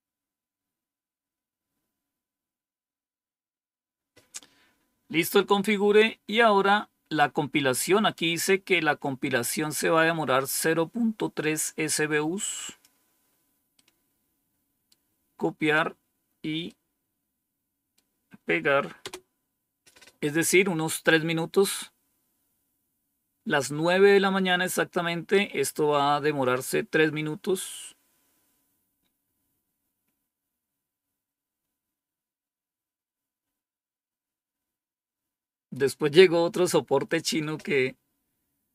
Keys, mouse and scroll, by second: 7.0-12.7 drag, 13.6-14.8 right drag, 16.5-17.9 right drag, 18.9 Return.